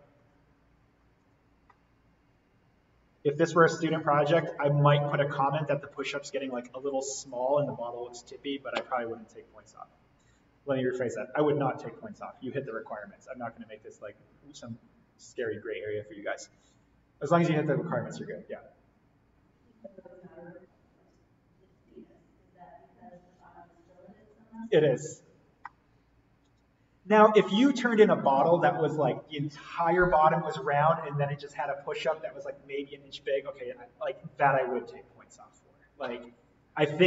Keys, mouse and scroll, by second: 1.1 click, 1.5 scroll up 1, 1.6-8.4 middle drag, 16.6-18.5 scroll up 1, 24.1 click, 25.6-29.5 middle drag.